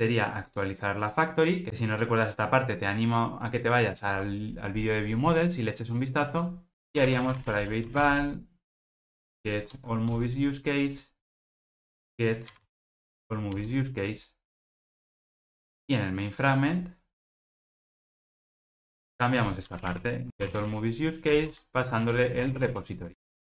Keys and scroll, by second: 10.2 Return, 20.3 alt+shift+Right, 21.4 Return.